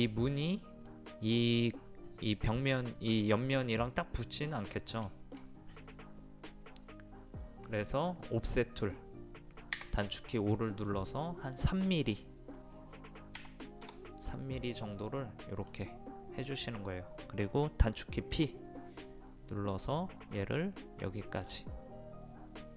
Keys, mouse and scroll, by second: 2.1-4.2 scroll up 1, 4.2 middle click, 4.5-5.1 scroll down 1, 5.1 middle click, 9.8 o, 10.7 click, 13.4 KP_3, 14.8-16.6 middle drag, 16.6-18.4 scroll up 1, 18.4 p, 19.7 click.